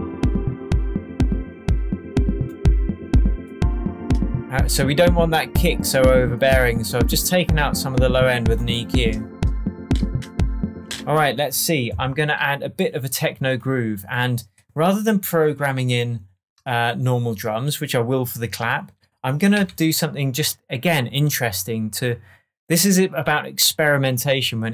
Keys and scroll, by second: 10.7 space, 11.2 super+s, 19.5 super+t.